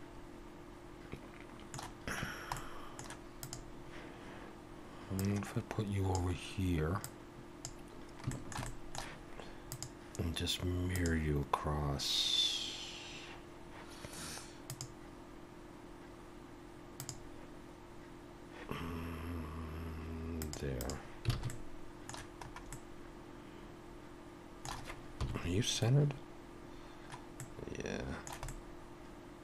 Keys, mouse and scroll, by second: 2.2 scroll down 1, 2.6 middle click, 3.4 click, 5.2 click, 8.3 shift+middle click, 8.6 middle click, 9.7 click, 14.7 click, 20.4 click, 20.8 click, 21.3 alt+a, 21.5 middle click, 22.4 scroll up 2, 22.7 middle click, 25.2 KP_7, 27.4 middle click.